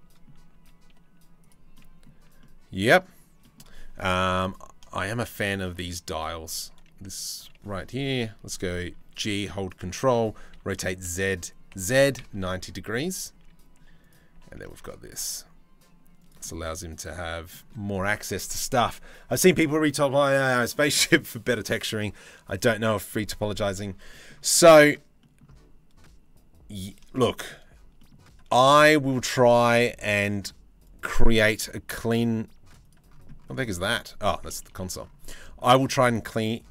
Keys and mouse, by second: 0.2 s, 1.4 middle click, 2.0 middle click, 3.0-4.4 middle drag, 4.5 shift+middle click, 8.7 g, 10.1 r, 12.9 s, 14.0 g, 16.1-17.1 middle drag, 23.7 middle click, 24.8 middle click, 26.6-27.1 shift+middle drag, 27.6 middle click, 31.8 s, 33.4 middle click, 34.5 Delete, 35.0 middle click, 36.3 right click.